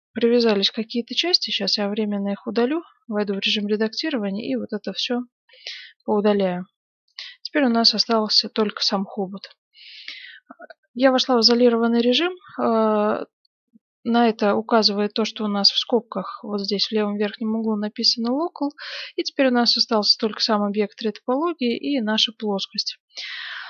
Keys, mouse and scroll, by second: 1.8 Tab, 3.7 b, 5.4 x, 7.2-12.3 middle drag, 7.8 Tab, 9.8 right click, 17.4-20.1 middle drag, 20.1-22.7 right drag, 22.0-23.6 middle drag.